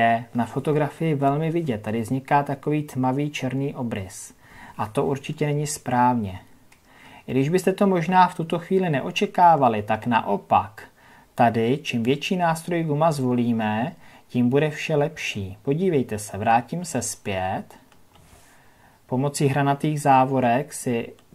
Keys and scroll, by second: 0.7 ctrl+KP_Add, 5.7 ctrl+KP_Subtract, 16.8 ctrl+z.